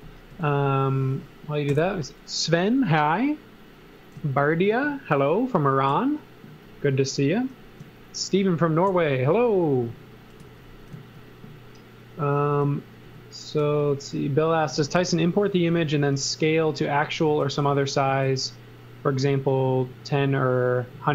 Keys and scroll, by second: 1.7 l, 10.4 x, 10.9 z, 13.0 e, 15.0 l, 17.3 space, 17.6 s.